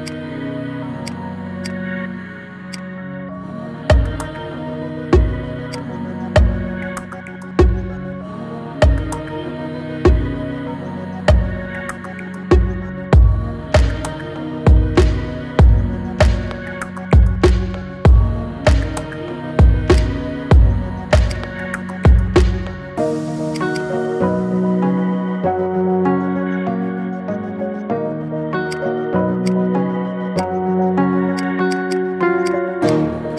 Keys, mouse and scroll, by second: 1.9-2.6 scroll down 2, 2.6 click, 3.1-3.4 scroll up 3, 3.4-4.3 middle drag, 4.3-5.0 scroll down 3, 5.0 KP_1, 5.3-5.6 scroll down 2, 5.6 click, 6.2-6.8 scroll down 3, 6.8-7.2 shift+middle drag, 7.2-8.0 scroll up 1, 8.0 scroll up 1, 8.5-9.2 shift+middle drag, 9.2-10.2 scroll up 1, 10.7-11.1 scroll down 1, 11.1-11.6 shift+middle drag, 11.6-12.0 scroll up 1, 12.0-13.0 shift+middle drag, 13.0-13.6 scroll down 1, 13.6 scroll up 1, 13.8-16.6 middle drag, 16.6 KP_1, 16.9-17.2 scroll down 3, 17.2-18.2 shift+middle drag, 18.2 ctrl+s.